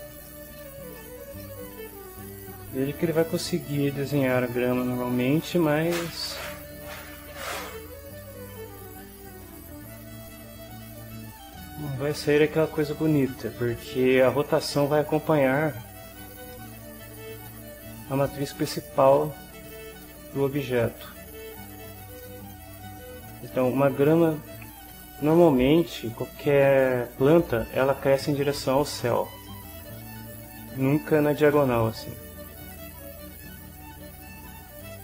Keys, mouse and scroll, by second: 0.2 ctrl+middle click, 1.0 ctrl+shift+middle click, 1.6-2.9 ctrl+shift+middle drag, 3.2-7.1 right drag, 7.2-11.2 right drag, 11.3 right click, 12.4-13.7 middle drag, 13.8 shift+middle click, 14.3-15.3 shift+middle drag, 16.5-21.4 middle drag, 22.2 middle click, 23.0 click, 23.4-24.8 drag, 29.4 click, 32.0-34.4 drag.